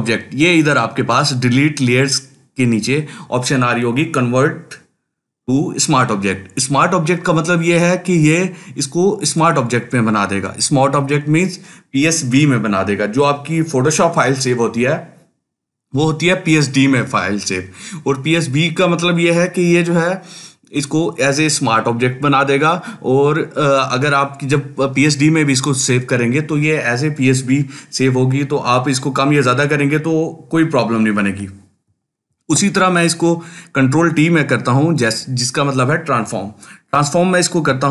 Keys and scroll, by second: 32.1 ctrl+t.